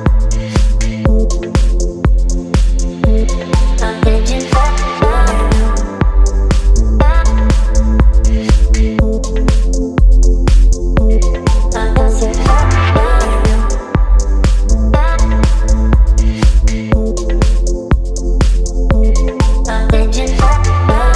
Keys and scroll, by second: 7.3 BackSpace, 7.6 BackSpace, 11.1 KP_3, 16.1 space.